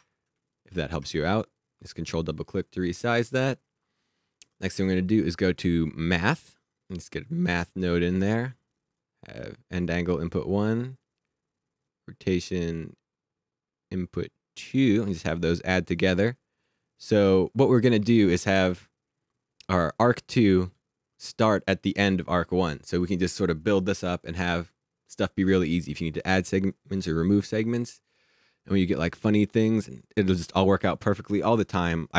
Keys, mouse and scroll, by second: 6.5 click, 9.0 click, 11.8 click.